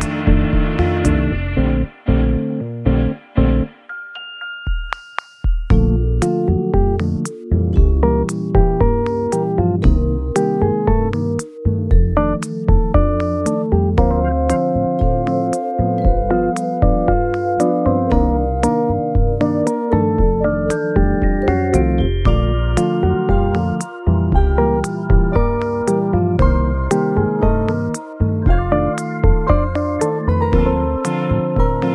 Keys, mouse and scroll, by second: 0.0 e, 0.6 e, 3.8 s, 4.2 s, 7.1 x, 9.1 m, 13.6 middle click, 16.9 m, 18.1 a, 18.1-19.5 scroll up 2, 19.6 scroll up 1, 19.8 ctrl+b, 22.4-23.3 scroll up 2, 24.8-25.4 scroll up 1, 27.4-27.9 scroll down 1, 30.6 scroll down 1, 30.8 Tab, 31.3 middle click.